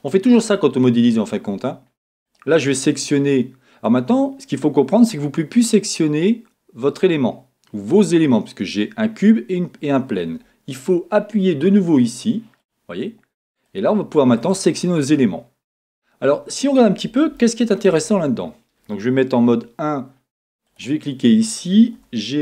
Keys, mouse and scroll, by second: 0.0 scroll up 1, 1.4 scroll down 1, 2.2 click, 3.8 click, 4.3 scroll down 2, 4.9 scroll up 2, 12.6 click, 13.7 click, 14.4 click, 15.8 scroll down 1, 17.4-20.7 shift+middle drag, 18.0-19.5 scroll up 3, 19.5 KP_1, 20.7 click, 22.0 g.